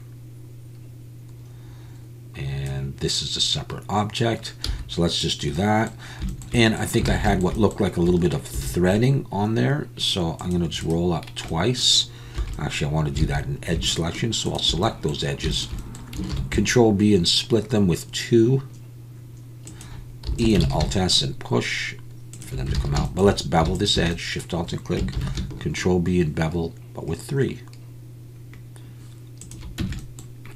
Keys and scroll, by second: 4.7 z, 7.1 alt+a, 8.5 ctrl+r, 12.4 2, 13.2 alt+a, 16.3 ctrl+b, 20.3 e, 20.7 alt+s, 22.8 alt+a, 25.2 ctrl+b, 29.8 Tab.